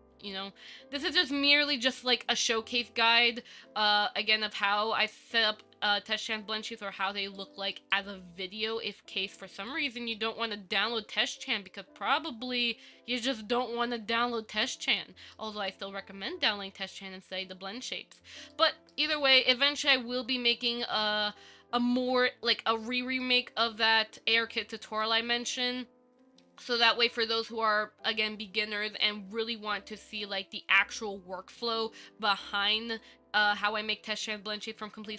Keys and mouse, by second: 0.5 ctrl+middle click, 1.2 middle click, 7.6 shift+middle click, 8.1-9.2 middle drag, 9.9 middle click, 11.1-11.7 shift+middle drag, 11.9-15.6 ctrl+middle drag, 15.9-18.4 middle drag, 18.7 shift+middle click, 20.0 KP_1, 22.8-23.4 ctrl+middle drag, 24.0-24.6 shift+middle drag, 25.2-25.7 ctrl+middle drag.